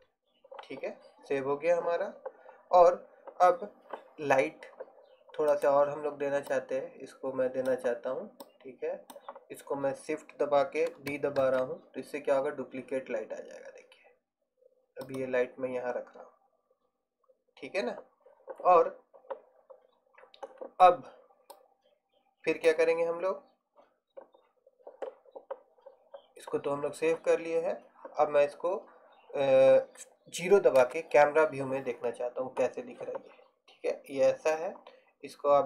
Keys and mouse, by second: 5.7 right click, 6.6 middle click, 11.6 shift+d, 31.0 KP_0.